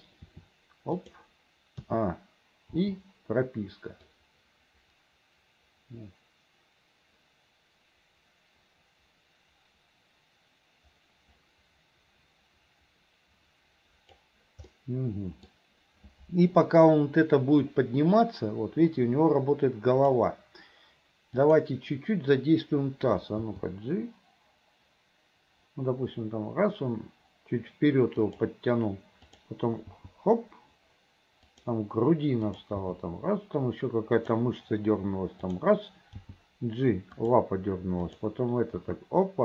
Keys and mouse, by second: 0.3 r, 1.9 a, 2.9 i, 4.2-14.3 drag, 14.9 middle click, 17.8-20.3 drag, 21.4 click, 23.5 g, 29.4 click, 30.0 g, 32.6 click, 32.9 g, 35.5 click, 36.2 g, 38.1 click, 38.9 g.